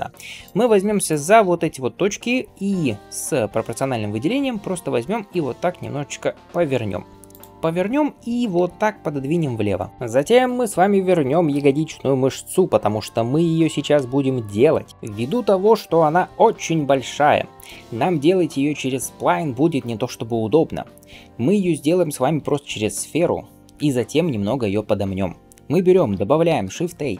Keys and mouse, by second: 5.0 r, 8.4 g, 9.9-17.5 middle drag, 17.5 shift+right click, 17.6-26.5 shift+middle drag, 26.3 shift+a, 27.1 middle click.